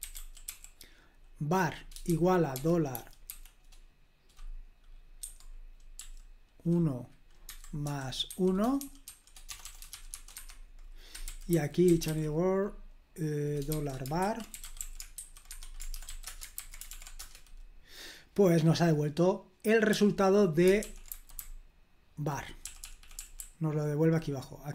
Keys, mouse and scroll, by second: 0.0-0.9 typing, 2.0-3.2 typing, 5.2 1, 8.0-12.3 typing, 10.3 Escape, 13.4-16.4 typing, 16.5 super+h, 16.9 ctrl+p, 17.1 Return, 19.8 j, 20.7 super+l, 21.0-24.3 typing.